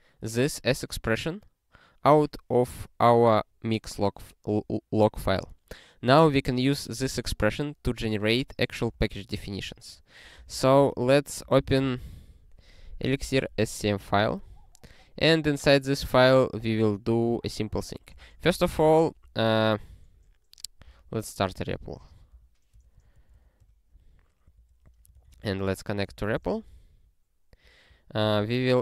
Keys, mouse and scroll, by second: 14.7 scroll up 6, 15.3 scroll up 1, 16.2 click, 17.8 ctrl+n, 18.1 ctrl+space, 18.2 ctrl+p, 18.5 alt+;, 18.9 ctrl+s, 19.2 ctrl+p, 22.1-23.0 typing, 24.8 super+o, 25.5 ctrl+s, 27.2 ctrl+e, 28.2 ctrl+n, 28.4 ctrl+n.